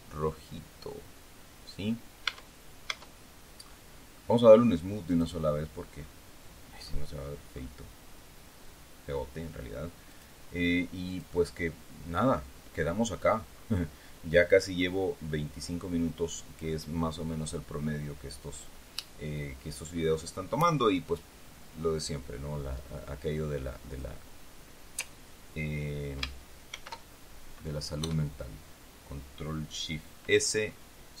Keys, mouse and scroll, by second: 0.5-0.9 scroll down 1, 1.5-1.9 scroll down 1, 2.1 Tab, 3.5-3.9 scroll up 1, 5.0 click, 5.8-6.1 scroll down 1, 6.7 scroll up 2, 7.4-7.7 scroll up 2, 8.6 scroll down 2, 10.0 click, 11.0 click, 11.9-12.3 scroll down 1, 12.4-13.0 scroll up 1, 13.0 scroll down 1, 13.4 scroll up 1, 13.8 scroll down 1, 14.7-15.0 scroll up 1, 23.8 click, 26.6 ctrl+shift+s, 27.9 KP_Add.